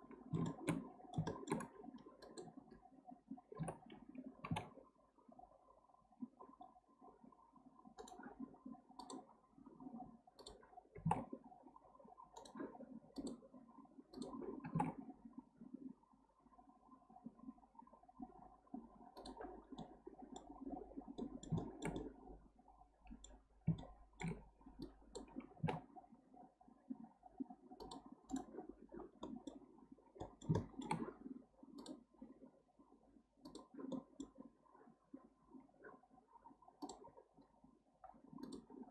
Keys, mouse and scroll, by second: 0.3-1.6 shift+middle drag, 1.6-2.1 scroll up 1, 2.2 click, 3.6 o, 4.4 g, 9.0-10.9 drag, 10.9 g, 13.1-14.6 drag, 14.6 g, 19.5 scroll down 2, 19.8 middle click, 20.6-21.2 scroll down 1, 21.2-23.4 middle drag, 23.4-23.8 scroll up 1, 23.8-24.8 shift+middle drag, 24.8 click, 25.5 g, 28.3 right click, 29.0 scroll down 2, 29.2 middle click, 30.2-31.8 middle drag, 31.8-33.9 drag, 33.9-36.8 middle drag, 38.6-38.9 drag.